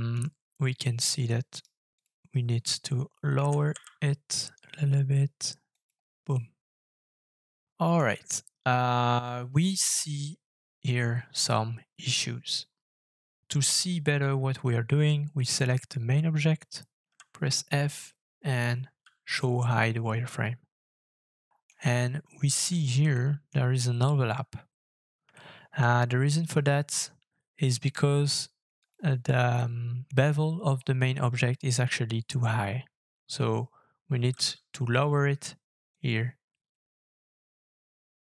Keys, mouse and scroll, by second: 1.5 right click, 3.4 g, 3.7 z, 6.3 middle click, 7.0 shift+middle click, 12.4-13.9 scroll down 10, 14.4-16.4 scroll down 1, 17.0 f, 19.9-21.0 scroll up 11, 21.3 middle click, 21.9 shift+middle click, 22.6-23.1 shift+scroll up 2, 23.1 shift+middle click, 25.3 shift+middle click, 26.2 scroll down 2, 27.2-29.4 scroll down 5, 29.6 middle click, 30.0 shift+middle click, 30.2 shift+scroll up 3, 31.0 scroll up 2, 34.3 f.